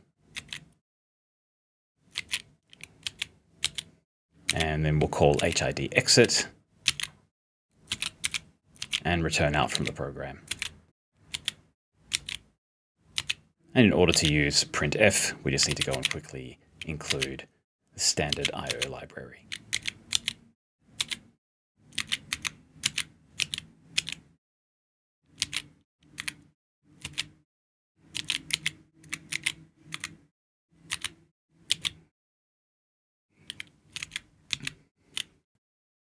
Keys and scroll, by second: 0.0-0.9 typing, 2.2 s, 3.1 s, 4.4-6.7 typing, 8.5-11.3 typing, 13.9-14.6 typing, 15.7 *, 17.1-20.6 typing, 21.7-23.9 typing, 25.2-26.1 typing, 27.9-32.3 typing, 34.1 g.